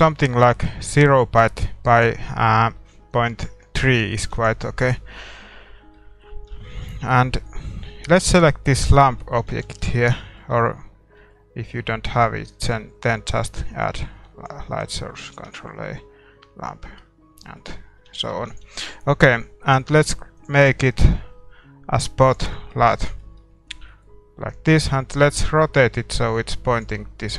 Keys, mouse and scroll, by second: 2.0-3.8 drag, 3.8-22.2 middle drag, 4.4 ctrl+s, 6.6 shift+z, 8.1-9.9 right drag, 9.9 ctrl+s, 13.8-17.4 drag, 17.4 shift+a, 18.7 ctrl+s, 18.7-25.3 drag, 22.7-27.3 middle drag, 26.1 r.